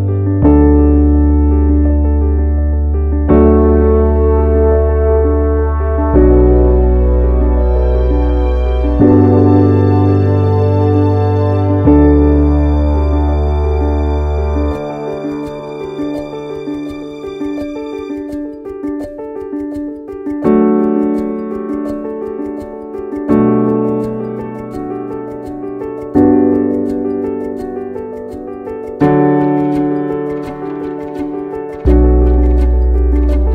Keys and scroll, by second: 31.5 ctrl+z.